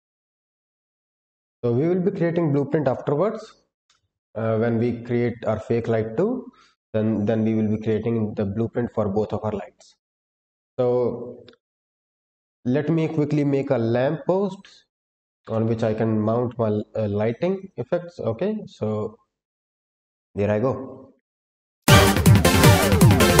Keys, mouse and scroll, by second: 4.0-6.3 scroll down 1, 7.2 click, 10.6 click, 12.3 Delete, 15.3-16.5 scroll up 1, 19.8 click, 21.6-23.4 typing, 21.7 Delete, 21.7 click, 21.8 scroll up 2, 21.9 Tab, 21.9 scroll down 2, 22.3 middle click, 22.4 shift+click, 22.5 middle click, 22.5 middle click, 22.6 ctrl+b, 22.9 click, 23.0 ctrl+z, 23.1 middle click, 23.2 middle click, 23.2 middle click.